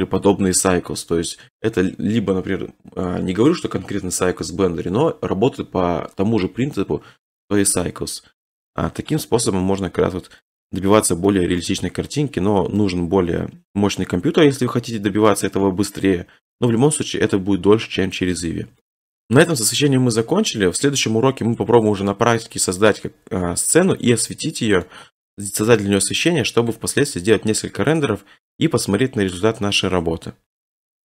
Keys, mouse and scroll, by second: 8.3 middle click, 8.4 middle click, 8.5 middle click, 10.4 middle click, 10.6 middle click, 10.7 middle click, 10.7 scroll, 11.6-13.3 middle click, 12.0-12.3 scroll, 15.3 middle click, 18.3 middle click, 19.0 middle click, 24.8 middle click, 26.7 middle click, 27.3 middle click, 27.4 middle click, 27.6 middle click, 27.7-28.0 scroll, 28.7 middle click, 28.7 click, 28.8 middle click, 28.8 middle click, 28.9 click, 29.7 click.